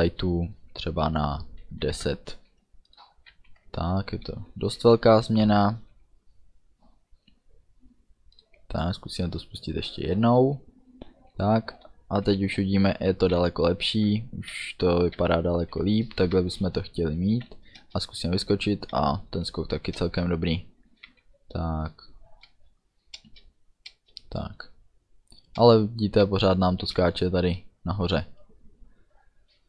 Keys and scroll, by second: 1.8 1, 2.0 0, 3.4 ctrl+s, 11.4 d, 12.4-15.3 typing, 16.4 a, 17.1 d, 17.9 space, 18.6 d, 19.7 a, 20.1 space, 20.7 d, 24.1 space.